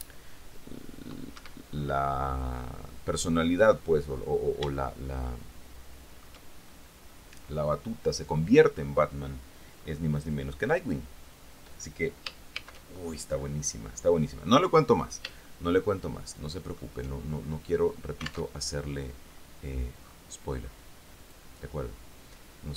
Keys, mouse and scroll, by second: 1.5 Escape, 2.0-2.5 scroll down 1, 5.0-7.0 shift+middle drag, 10.0-10.9 scroll down 2, 12.7 shift+c, 13.5-14.8 scroll up 2, 15.6-17.3 shift+drag, 18.7 alt+Tab, 21.5-22.7 drag.